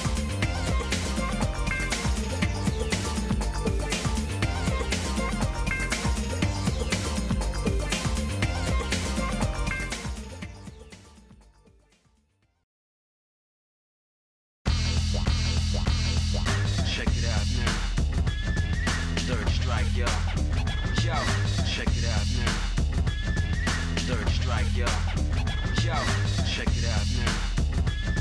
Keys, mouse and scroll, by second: 0.4 g, 3.1-4.5 shift+middle drag, 4.7 middle click, 4.9 scroll down 1, 5.4 shift+middle click, 6.2-6.6 scroll down 2, 6.5 scroll up 1, 6.6 scroll down 1, 6.9-8.0 shift+middle drag, 8.2 middle click, 8.7 click, 9.4 shift+middle click, 10.6 KP_1, 11.6 z, 12.9-13.4 scroll up 2, 13.5 scroll down 1, 13.9 middle click, 14.3 scroll up 1, 15.7 KP_1, 16.3 KP_3, 17.4 middle click, 18.0 middle click, 18.6-22.4 middle drag, 23.2-24.6 middle drag, 25.6 g.